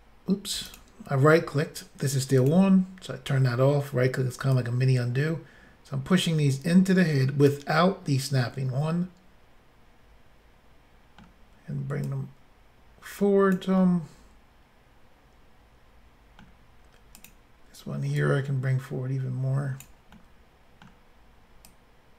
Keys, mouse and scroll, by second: 0.6 right click, 0.7 right click, 2.4 click, 2.5 click, 4.5 click, 8.4 middle click, 12.1 click, 13.8 middle click, 17.2 click, 18.5 click, 19.8 click, 20.2 middle click, 21.7 click.